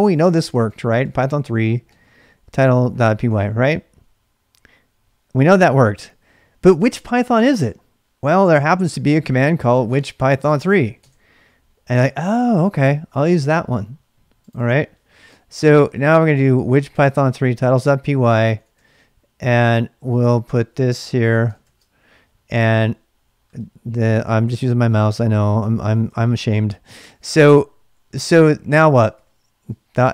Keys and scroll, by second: 0.0-2.9 typing, 3.2 Return, 8.0-11.2 typing, 15.3-22.1 typing, 25.1 ctrl+[, 25.2-30.1 typing.